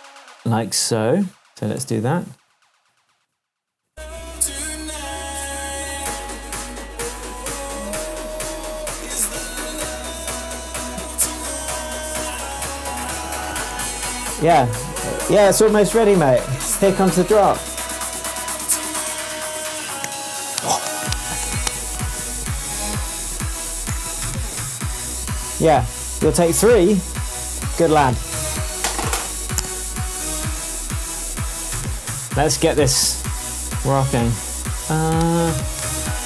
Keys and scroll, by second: 1.8 BackSpace, 34.9 super+d.